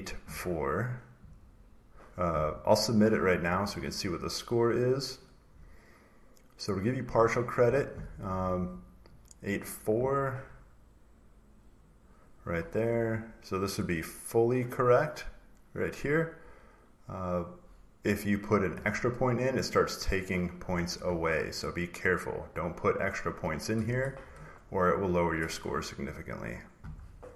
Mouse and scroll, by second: 3.4 scroll down 2, 4.8 click, 5.5 scroll, 9.4 click, 11.7 click, 13.0 scroll down 1, 13.3-13.7 scroll, 13.8 scroll down 1, 13.9-14.3 scroll, 14.3 click, 15.0 click, 15.4 scroll, 16.4 scroll down 1, 16.4-16.8 scroll, 16.8 scroll down 2, 17.1 scroll, 18.2 click, 18.6 scroll down 2, 18.9 scroll, 19.9 click, 22.5 click, 23.0 scroll down 1, 23.6 click, 23.6 scroll, 23.9 click, 24.2 click, 24.2 scroll down 1, 25.2 click.